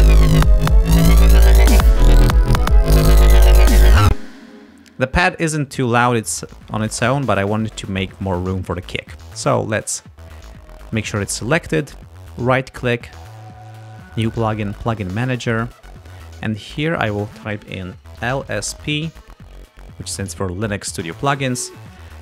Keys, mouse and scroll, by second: 4.1 space, 9.8 click, 12.4 right click, 15.4 click, 16.9 click, 17.6 ctrl+a, 18.0-19.3 typing, 21.5-22.2 typing.